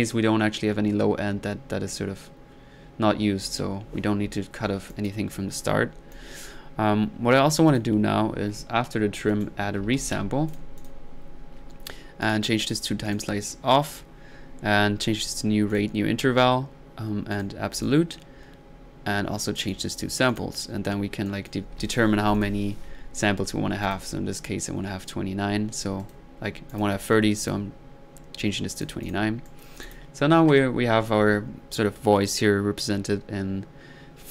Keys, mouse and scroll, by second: 2.9 middle click, 3.4 middle click, 4.0-4.4 middle drag, 4.9 click, 9.3 right click, 9.6-10.6 typing, 10.5 drag, 10.8 click, 12.2 drag, 12.7-13.0 drag, 13.1 click, 15.3 drag, 15.7 click, 17.3-18.1 drag, 19.6-20.9 drag, 21.3 click, 23.9 click, 26.0 middle drag, 26.7 click, 27.1-27.4 middle drag, 27.4 click, 28.7 click, 29.5 middle click, 29.9 click.